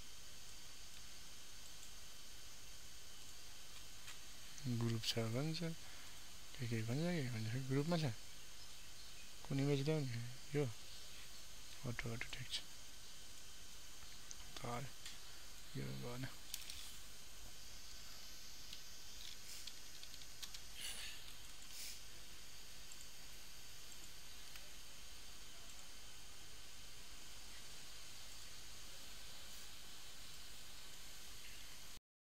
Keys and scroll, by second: 18.7 ctrl+alt+w.